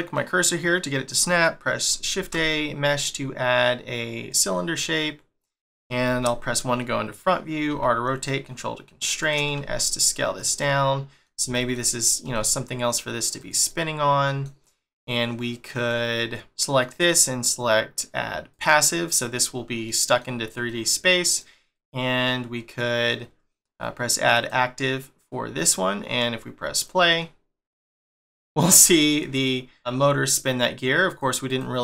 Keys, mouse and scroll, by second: 2.2 shift+a, 4.7 middle click, 6.1 1, 10.6 middle click, 11.5 s, 13.7 middle click, 14.6 scroll up 1, 15.0 middle click, 15.8-16.4 scroll down 2, 18.5 click, 19.8 middle click, 20.7 middle click, 21.7 click, 22.2 middle click, 24.3 click, 26.7 click, 29.0 middle click, 29.9 scroll down 1, 31.1 click, 31.5 click.